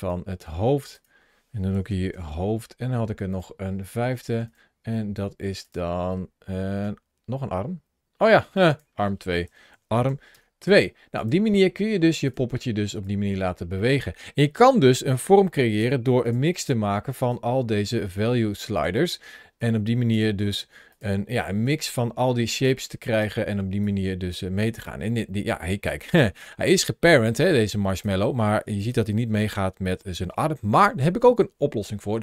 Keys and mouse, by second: 0.6 click, 1.5-3.2 shift+drag, 1.8 o, 4.1 click, 4.3-5.5 drag, 5.9 click, 8.4 click, 9.2-11.1 shift+drag, 12.9-15.6 drag, 16.1 click, 16.4 click, 17.1 click, 18.6 click, 19.4 click, 20.7 click, 21.5-22.5 drag, 23.0 click, 23.6-25.7 drag, 26.3-27.3 middle drag, 27.8 click, 28.6 g, 29.2 right click, 30.0-32.2 middle drag.